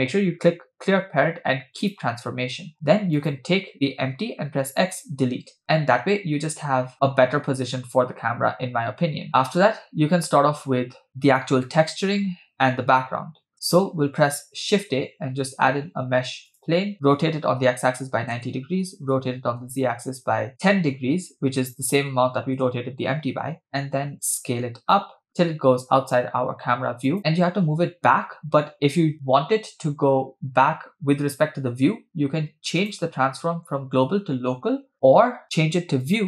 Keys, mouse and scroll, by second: 3.2 click, 4.5 x, 6.1 space, 13.5 space, 14.7 shift+a, 17.2 r, 19.1 r, 24.3 s, 32.8-36.2 drag.